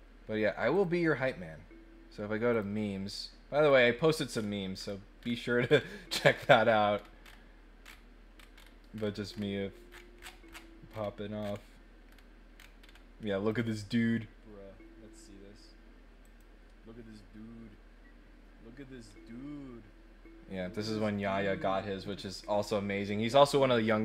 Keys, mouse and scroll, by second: 0.7 click, 2.5 click, 3.6-5.3 scroll up 5, 5.3 scroll down 1, 5.6 scroll up 1, 6.2 middle click, 6.4 middle click, 6.9 middle click, 7.2 middle click, 7.8 middle click, 8.3 middle click, 8.5 middle click, 8.9-9.4 scroll up 4, 9.8-11.5 scroll down 9, 11.9 scroll up 1, 12.0 scroll down 1, 12.1 scroll up 1, 12.5 scroll down 1, 12.8 scroll up 1, 13.5 click, 16.2 click.